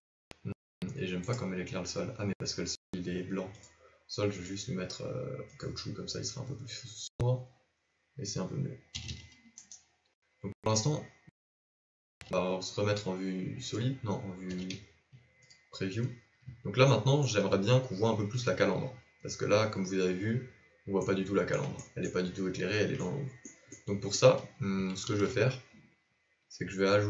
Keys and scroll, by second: 9.1 a, 9.3 a, 11.5 z, 14.4 z, 25.0 shift+a.